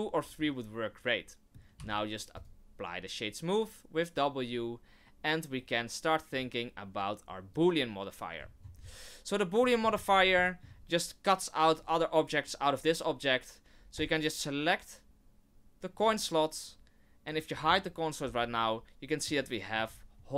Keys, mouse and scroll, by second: 0.4 middle click, 1.7 w, 6.3 click, 8.4-9.3 scroll down 15, 9.6 middle click, 9.8 middle click, 10.0 scroll up 4, 10.4 shift+middle click, 13.9 click, 17.3 right click, 18.2 h, 18.6 middle click, 19.4 middle click, 19.9-20.3 scroll up 4.